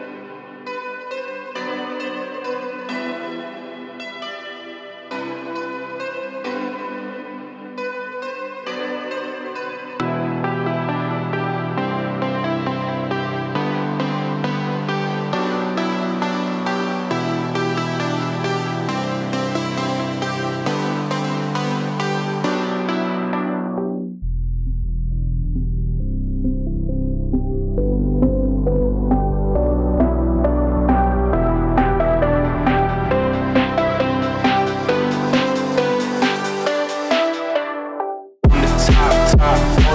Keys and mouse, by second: 0.8 click, 1.2 click, 1.8 g, 3.0 g, 4.4 `, 6.1 click, 6.6 click, 6.8 g, 8.4 click, 8.8 g, 10.2 g, 11.0 click, 11.1 g, 12.3 click, 12.4 g, 13.5 click, 13.7 g, 15.3 middle click, 16.3 click, 16.7 g, 17.0 click, 17.3 g, 19.3 click, 20.1 click, 20.3 `, 21.7 click, 22.9 click, 23.5 click, 24.8 click, 25.1 g, 29.6-31.9 drag, 32.4 click, 32.7 shift+click, 33.4-34.5 drag, 35.3 click, 35.8-36.8 drag, 37.4 click, 37.6 shift+click, 37.9 shift+click, 38.4-39.7 drag.